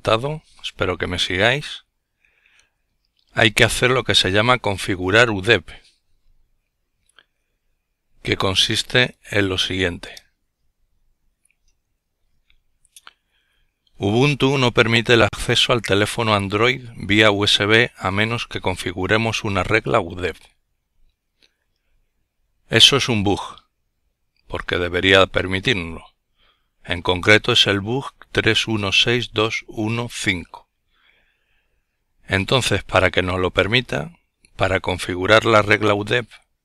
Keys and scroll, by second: 4.8-5.2 typing, 5.8 Return, 7.8 ctrl+l, 35.6-36.6 typing.